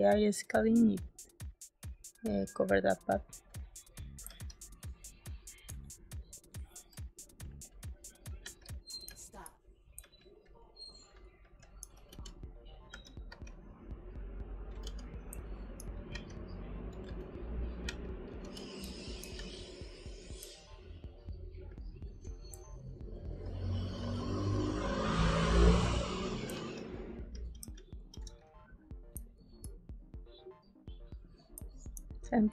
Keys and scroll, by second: 4.2 space, 7.4 g, 8.3 b, 9.0 space, 9.9 space, 12.0 g, 12.8 z, 13.2 b, 14.7-19.3 typing, 20.3 space, 23.9 g, 26.4 space, 28.1 b, 29.1 space, 31.5 space.